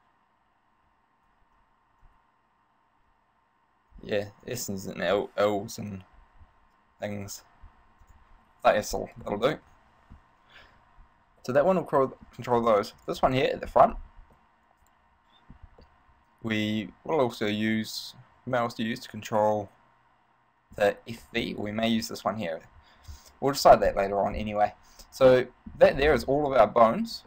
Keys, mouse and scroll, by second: 9.4 middle click, 10.9 scroll up 1, 11.5 middle click, 12.1 middle click, 12.8 right click, 13.2 right click, 14.2 scroll down 3, 14.6 middle click, 16.0 middle click, 21.4 middle click, 21.9 right click, 25.5 middle click, 26.2 scroll down 5, 26.8 middle click.